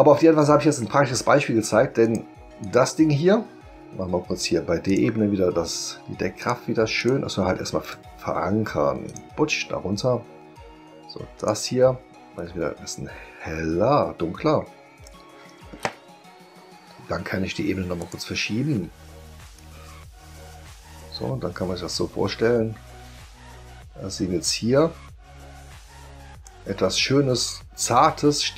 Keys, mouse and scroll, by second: 2.0 click, 2.6 click, 4.9 click, 6.4 click, 7.0 click, 7.8 right click, 9.1 click, 11.4 click, 12.4-15.0 drag, 18.0 click, 19.5-26.4 drag.